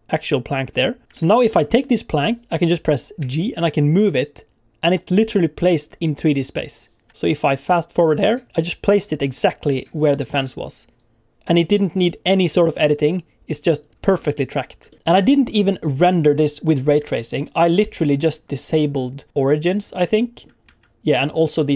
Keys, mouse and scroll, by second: 1.1 click, 1.1 alt+a, 1.4 click, 3.2 g, 7.1 Escape, 7.3 click, 7.9 scroll down 2, 8.2 shift+middle click, 8.5 click, 8.5 scroll down 1, 9.9 scroll down 2, 10.2 shift+middle click, 11.0 click, 13.9 alt+a, 14.0-14.8 scroll up 3, 14.9 shift+middle click, 15.0 click, 15.7 click, 17.0 alt+a, 17.3 click, 18.1 click, 19.5 click, 19.7 scroll down 2, 20.1 shift+middle click, 21.3 click.